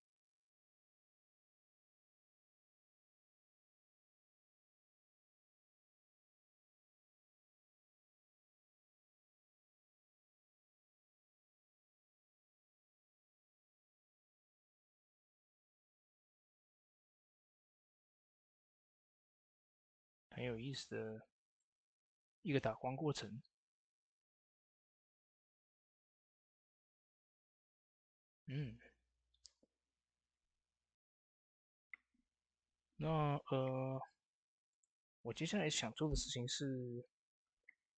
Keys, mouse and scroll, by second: 0.5 ctrl+s, 1.1 shift+d, 3.9-23.8 drag, 25.2-29.8 drag, 33.6 ctrl+s, 34.5 click.